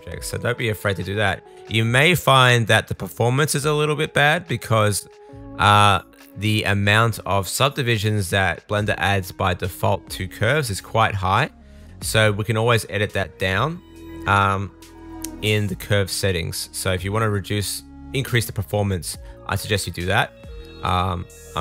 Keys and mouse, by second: 18.7-20.9 middle drag, 21.4 Tab.